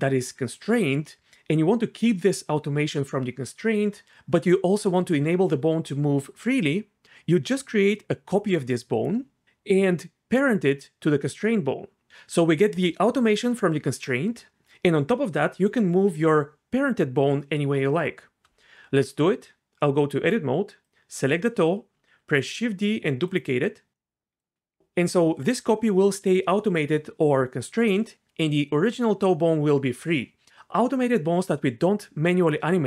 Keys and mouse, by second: 19.2 Tab, 22.2 shift+d.